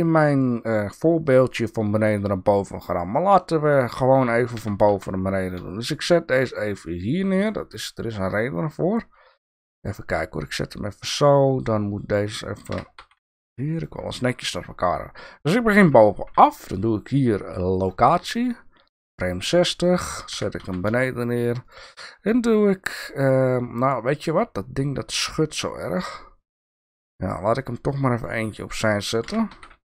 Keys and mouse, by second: 3.1-3.5 shift+drag, 4.5 g, 12.7 g, 16.3 i, 20.3 g, 24.4-28.2 drag, 29.2 g.